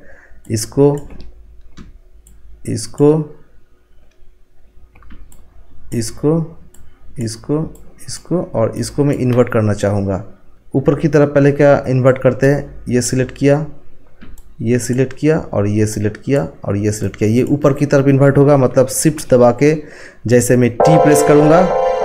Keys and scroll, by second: 20.7 t.